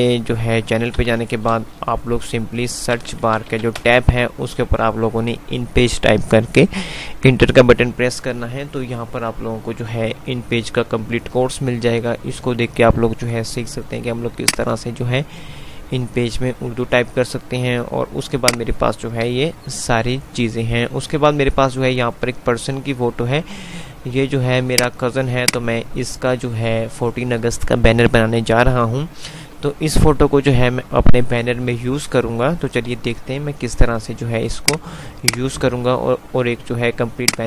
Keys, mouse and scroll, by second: 0.7-4.1 typing, 14.4 click, 17.9 click, 19.4 F3, 21.1 F2, 24.1 click, 33.1 F3, 34.8 click, 34.9 F2, 35.4 click, 36.4 F2.